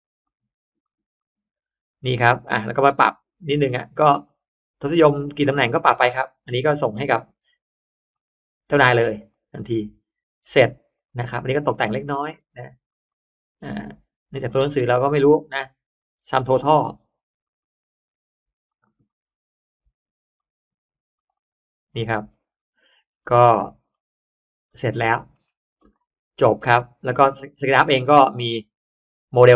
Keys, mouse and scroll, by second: 0.1 click, 0.7 click, 3.2 click, 4.1 click, 5.3 click, 6.7 click, 8.0 click, 9.2 click, 9.5 click, 10.9 click, 12.1 click, 12.8 click, 14.3 click, 15.1 click, 15.9 click, 17.3 click, 18.6 click, 18.8 click, 20.3 click, 21.1 click, 21.3 click, 22.3-24.4 scroll down 2, 24.7-25.7 scroll up 1, 25.7 click, 26.2 scroll up 1, 26.3-26.6 scroll down 1, 28.5 click, 29.2 click.